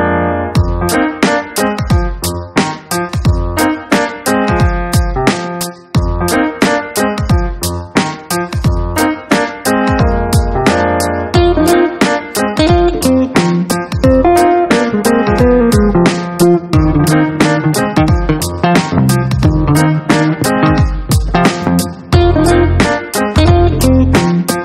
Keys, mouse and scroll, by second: 1.8 click, 4.1 click, 8.4 click, 9.8 click, 11.6 click, 14.6 click, 20.2 click, 22.3 click, 23.6 click.